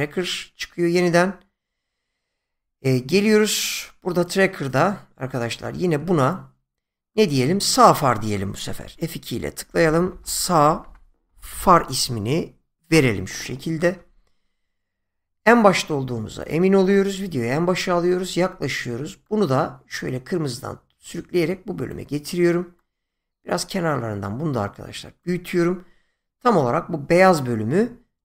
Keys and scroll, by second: 8.8 F2, 9.7-12.0 typing, 12.9 Return.